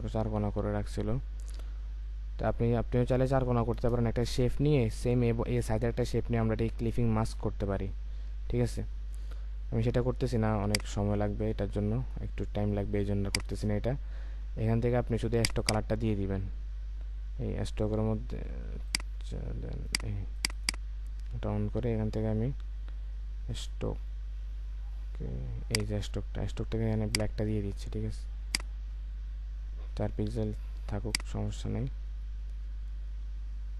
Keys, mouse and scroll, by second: 3.8 Return, 8.1-9.0 alt+scroll up 1, 15.6 double click, 20.5 double click, 28.9-29.6 scroll down 1, 29.6-31.3 scroll up 1, 32.1-32.5 alt+scroll down 1.